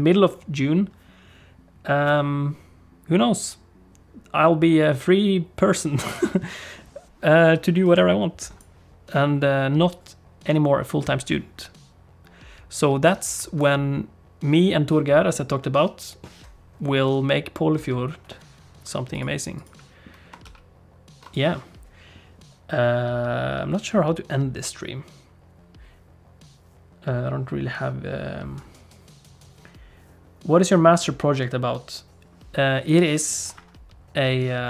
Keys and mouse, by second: 20.4 ctrl+s.